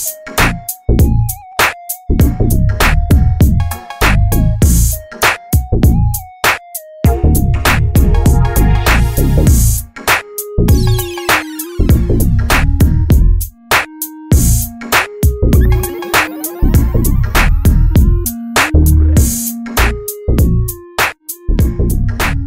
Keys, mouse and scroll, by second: 13.2 a, 17.5-19.8 drag, 22.1 click.